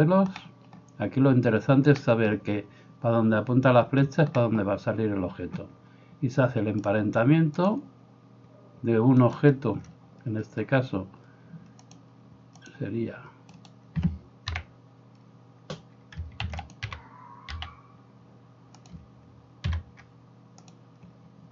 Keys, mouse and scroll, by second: 9.3 middle click, 9.3 right click, 13.6 middle click, 13.6 right click, 14.6 l, 16.5 shift+d, 16.8-21.5 middle drag, 16.8 g, 19.7 p.